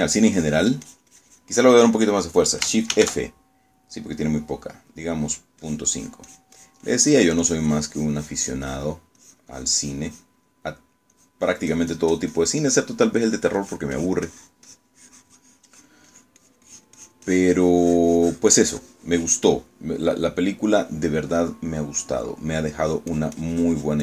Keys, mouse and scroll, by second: 0.0-2.7 drag, 4.0 shift+f, 5.8 click, 6.7-10.1 drag, 10.3-11.5 drag, 11.6 middle click, 14.0 middle click, 14.7-20.6 drag, 20.7 middle click, 21.8-23.6 middle drag, 23.8-24.0 drag.